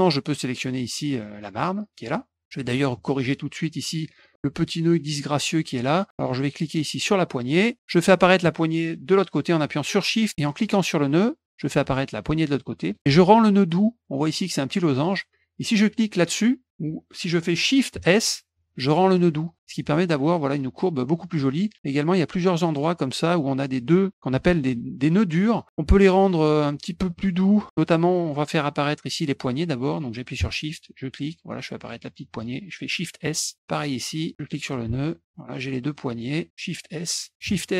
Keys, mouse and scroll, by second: 0.9 click, 1.4 click, 3.6 click, 4.0 scroll up 2, 5.1 click, 6.1-7.5 drag, 10.9-12.9 shift+drag, 18.5 shift+s, 19.1 click, 19.5 click, 21.7 middle click, 22.7 click, 26.1 click, 27.0 middle click, 30.8-32.0 shift+drag, 33.4 s, 34.3 shift+click, 35.0 shift+click, 35.9 click, 37.3 click, 37.3 shift+s.